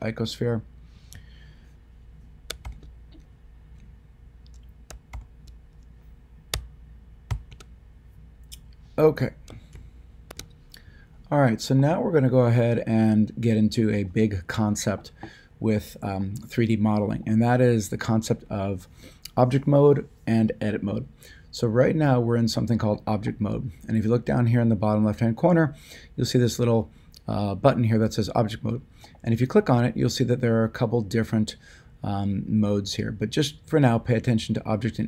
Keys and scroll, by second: 2.6 >, 5.1 ctrl+., 7.3 ..